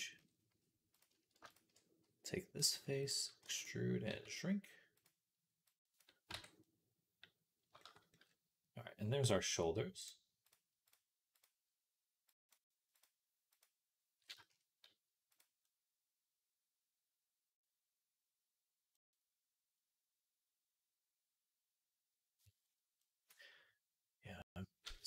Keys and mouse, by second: 2.4 click, 2.4 middle click, 2.4-5.6 right drag, 3.3 e, 3.5-15.4 drag, 3.9 s, 6.2 Tab, 15.8-19.1 middle drag, 19.2-23.6 middle drag.